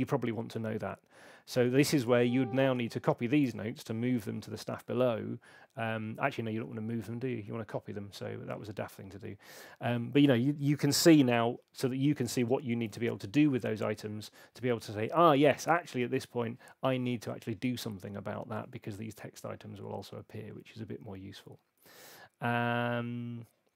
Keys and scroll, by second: 4.4 alt+m, 12.9 super+z.